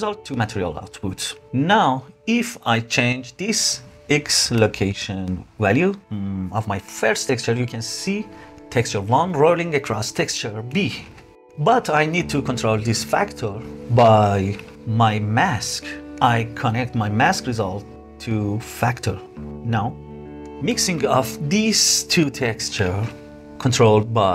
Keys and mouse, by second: 3.7-6.6 shift+drag, 7.8-11.3 shift+drag, 11.5 click, 12.5 click, 15.0 click, 15.7-18.9 drag, 19.7 click, 23.5 click.